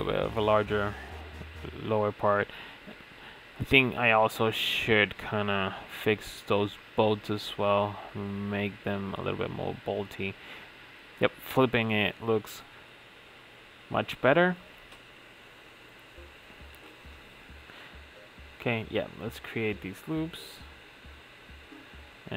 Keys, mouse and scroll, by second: 0.1-1.4 middle drag, 1.4 Tab, 1.9 s, 4.1-5.5 middle drag, 5.5 Tab, 6.0 a, 7.2 ctrl+m, 9.8-10.8 middle drag, 10.8 Tab, 11.0 click, 11.3 scroll down 1, 11.5 middle drag, 11.8 click, 12.0-12.8 right drag, 12.8-13.8 middle drag, 13.8 click, 14.4 click, 14.7 drag, 15.0-15.5 middle drag, 15.5-15.9 scroll up 5, 15.9 click, 16.1 Tab, 17.3 ctrl+r, 19.8-21.3 right drag, 21.5 middle click, 22.2 ctrl+r.